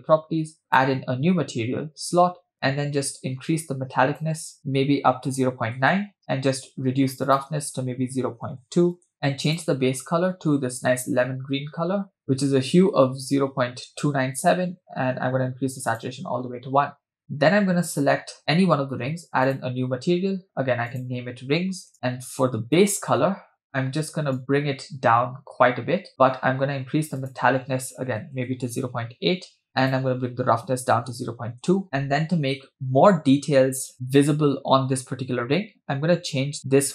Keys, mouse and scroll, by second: 0.7-1.3 drag, 2.5-3.1 scroll down 2, 3.5 click, 4.6-5.9 drag, 6.6-7.2 scroll down 2, 7.3-9.1 drag, 9.1 scroll down 1, 9.5 click, 17.9 click, 19.5-20.1 drag, 20.9-21.9 drag, 21.9 scroll down 1, 22.6 click, 26.2-27.2 scroll down 2, 27.2-29.0 drag, 29.7 scroll down 3, 29.8-31.8 drag.